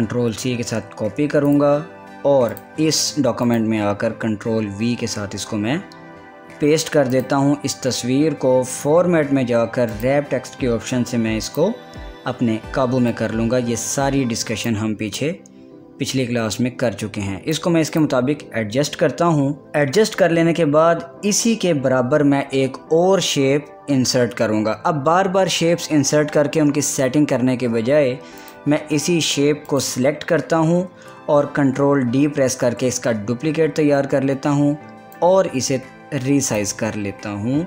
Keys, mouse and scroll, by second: 0.7 ctrl+c, 2.1 click, 3.4 click, 5.8 ctrl+v, 7.7 click, 14.6-18.5 drag, 19.6 Up, 20.1 click, 29.0 click, 32.7 ctrl+d, 36.0-37.6 drag.